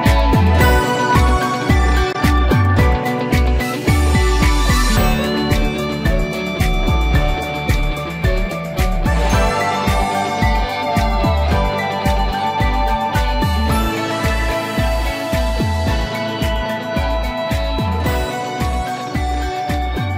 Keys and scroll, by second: 5.2 ctrl+0.